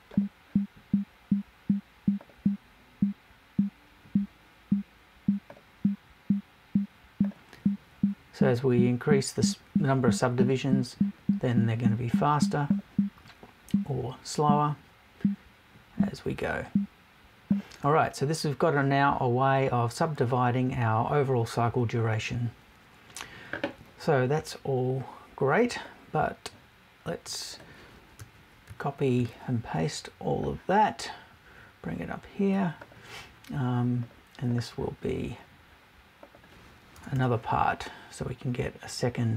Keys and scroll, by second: 36.9 BackSpace.